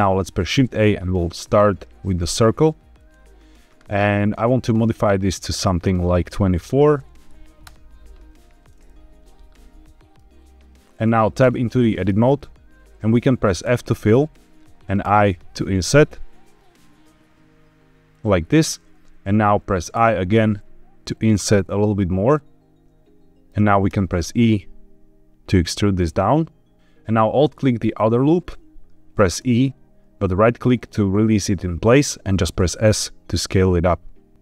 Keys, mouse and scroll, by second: 0.5 shift+a, 4.1 click, 5.6-7.6 drag, 9.2-10.1 middle drag, 10.7-11.4 scroll up 3, 11.4 Tab, 13.6 f, 14.9 i, 18.0-19.9 drag, 19.9 i, 22.8 middle click, 22.8 click, 23.8 e, 26.7 click, 27.8 alt+click, 29.3 e, 31.4-32.4 right drag, 32.5 s.